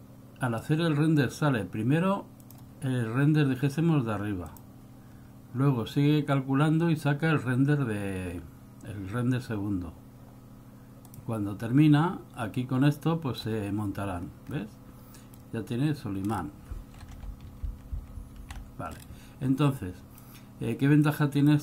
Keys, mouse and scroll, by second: 2.6 click, 12.7 click, 14.4-15.8 scroll up 4, 14.7 middle click, 15.9-16.3 scroll up 2, 16.5 scroll down 3, 17.8 alt+v, 18.1 alt+v, 18.3 alt+v, 18.5 alt+v, 19.1-19.5 scroll down 2, 19.9 click, 21.2 click.